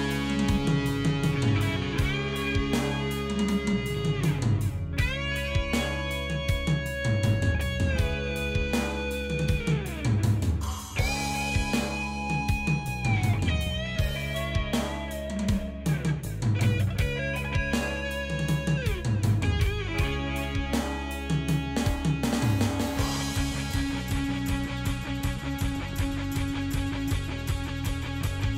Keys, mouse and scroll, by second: 1.6 click, 2.8-5.2 drag, 6.3 click, 7.4 click, 8.5-9.6 ctrl+drag, 9.9 ctrl+click, 12.3 click, 15.7-17.4 drag, 18.4 ctrl+g, 20.0 click, 21.1 click, 22.4 click, 23.4 click, 24.4 click, 25.2 click, 27.2 click.